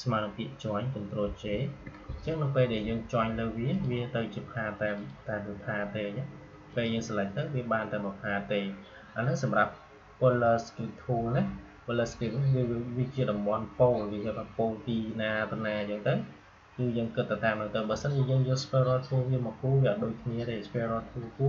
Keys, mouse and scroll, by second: 1.1 ctrl+j, 3.6 click.